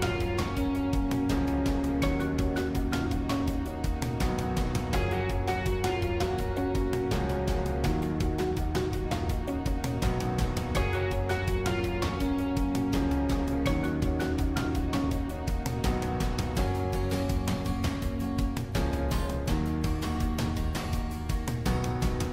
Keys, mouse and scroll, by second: 5.3-7.0 middle drag, 7.0 right click, 10.4-12.8 drag, 16.4-19.9 shift+drag.